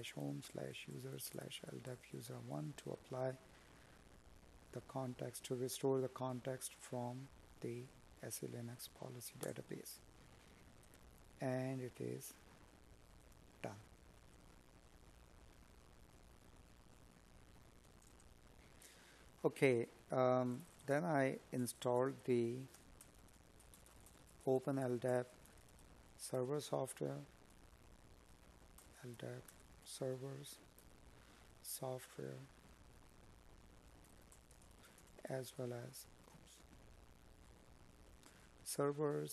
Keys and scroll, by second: 16.6 space, 17.7 space, 18.8 space, 20.1 space, 25.3 Tab, 29.0 space, 33.2 Tab, 35.7 space.